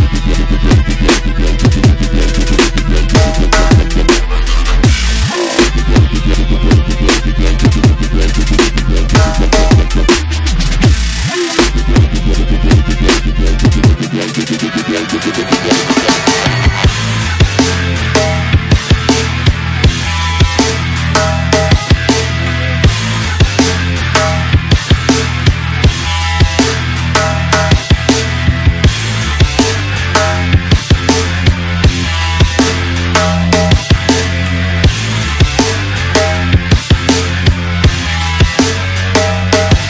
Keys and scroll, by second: 0.8 alt+s, 1.0 ., 1.3 Return, 3.4-4.2 typing, 14.0 ., 15.2 ., 15.9 ., 17.2-21.0 typing, 22.2 ., 25.1 ctrl+f, 25.3 ., 25.7 ctrl+y, 26.1 ., 26.2 ., 28.6 shift+Right, 31.0 shift+Down, 33.3 shift+Down, 39.2 ctrl+u, 39.6 ctrl+c.